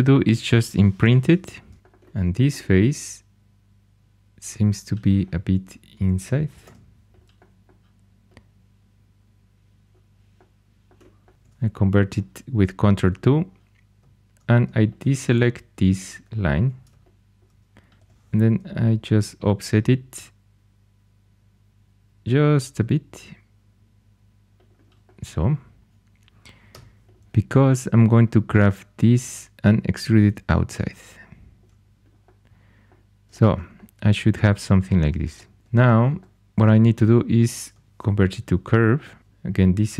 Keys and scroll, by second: 1.0 shift+Tab, 6.6 3, 11.3 ctrl+2, 16.5 2, 18.0 o, 26.7 3, 35.6 2, 37.9 ctrl+2, 39.2 ↺.